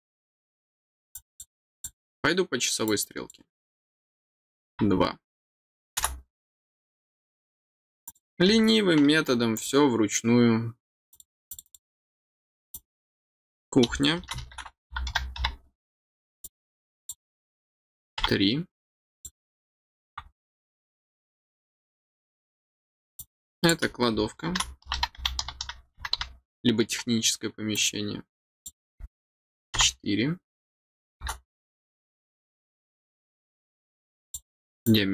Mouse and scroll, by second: 1.1 click, 1.3 click, 1.7 click, 2.8 click, 8.0 click, 9.5 click, 11.1 click, 11.5 click, 12.7 click, 16.4 click, 19.1 click, 20.4 click, 23.1 click, 27.7 click, 28.3 click, 34.2 click, 34.8 click.